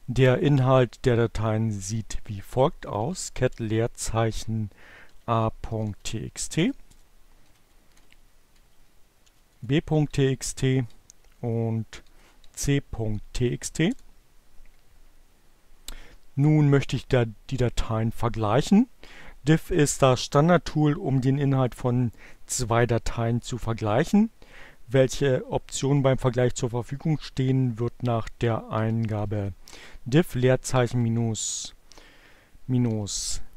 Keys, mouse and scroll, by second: 0.6-1.5 typing, 2.9-4.2 typing, 5.5-6.6 typing, 6.9 Return, 7.7 Left, 8.5 Delete, 8.5 b, 9.4 Return, 9.7 Up, 10.9 Left, 12.0 Delete, 12.1 c, 13.9 Return, 28.5-29.4 typing, 30.5 -, 31.5 h.